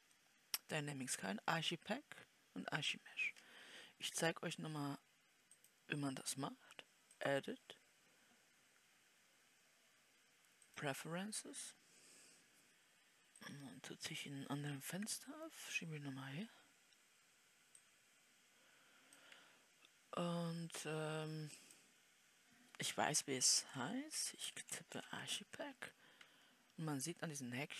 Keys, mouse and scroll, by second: 15.2 click.